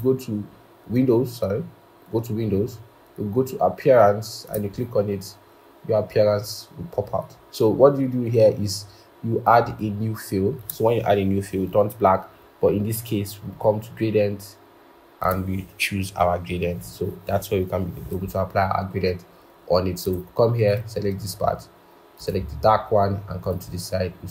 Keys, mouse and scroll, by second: 18.2-18.6 scroll.